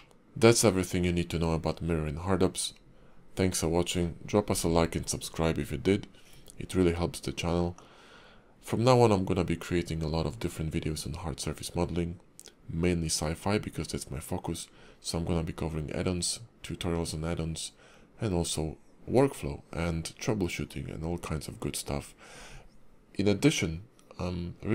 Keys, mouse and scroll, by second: 0.1 shift+middle click.